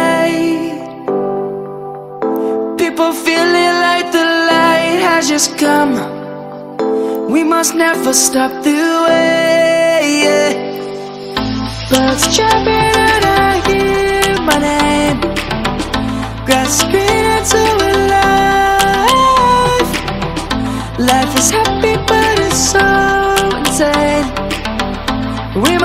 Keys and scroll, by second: 0.1 F2, 0.3 F1.